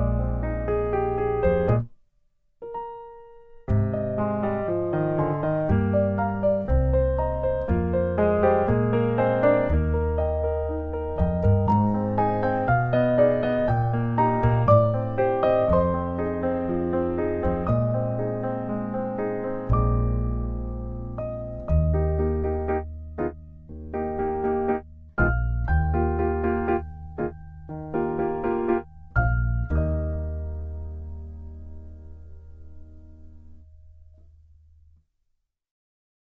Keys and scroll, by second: 1.3 8, 1.4 F2, 3.3 ctrl+shift+c, 3.3 ctrl+v, 6.1 ctrl+shift+c, 6.5 ctrl+v, 9.2 8, 9.6 F2, 12.8 Tab, 17.5 Tab, 31.9 8, 32.1 F2.